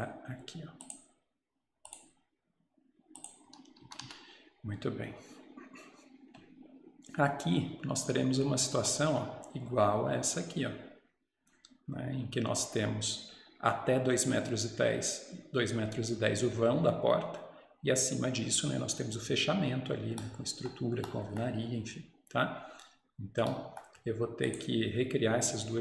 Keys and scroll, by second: 4.0 Escape, 4.1 Escape.